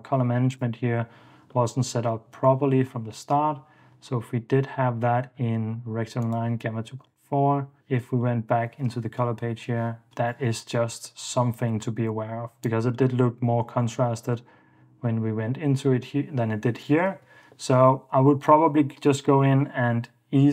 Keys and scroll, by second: 10.1 super+f, 10.7 super+f, 11.2 super+d, 17.3 ↺, 17.8 super+s.